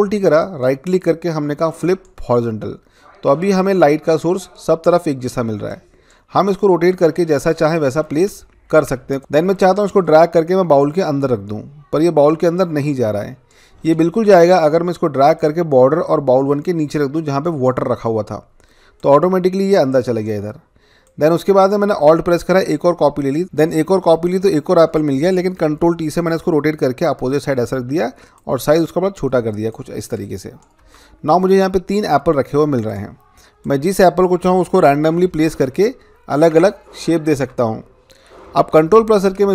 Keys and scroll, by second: 8.7 ctrl+z, 9.2 Return, 25.6 ctrl+t, 31.6 Return, 34.8 ctrl+t, 37.4 Return, 38.6 ctrl+=, 38.8 ctrl+=.